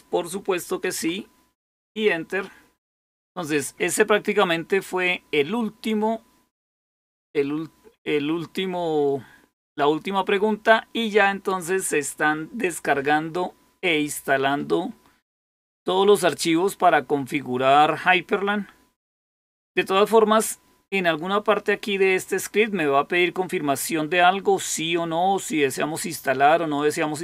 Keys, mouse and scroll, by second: 1.6 Return.